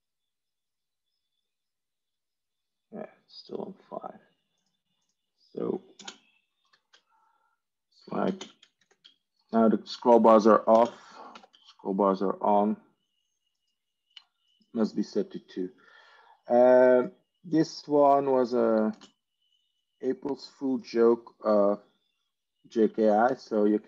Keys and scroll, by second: 5.1 ctrl+e, 5.9 ctrl+space, 6.6 ctrl+5, 8.1 ctrl+space, 8.6 ctrl+5, 10.6 ctrl+space, 11.2 ctrl+5, 18.8 ctrl+space, 23.1 ctrl+3.